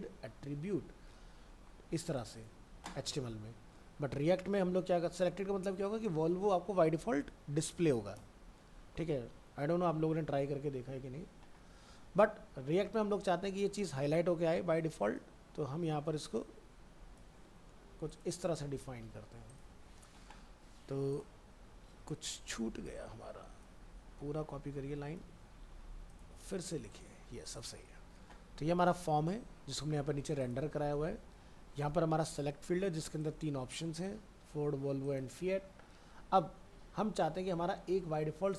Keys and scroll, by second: 17.4 ctrl+c, 18.8 ctrl+a, 19.0 ctrl+v, 21.9 alt+Tab, 25.3 ctrl+c, 25.7 alt+Tab, 26.3 ctrl+a, 26.6 ctrl+v.